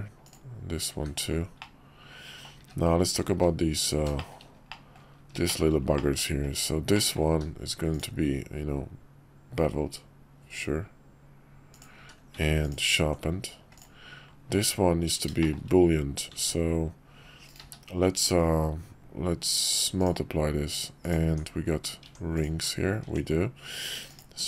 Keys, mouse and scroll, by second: 1.0 h, 1.6-2.5 middle drag, 2.6 `, 3.3 `, 4.2 shift+middle click, 4.7 middle drag, 5.4 shift+middle drag, 5.9 middle drag, 6.5 click, 6.9 middle click, 7.3 q, 11.9 q, 13.7 click, 15.4 shift+middle click, 16.4 ctrl+`, 17.6 q, 21.0 click, 21.3 Tab, 22.3 click, 23.0 Tab, 24.1 shift+click.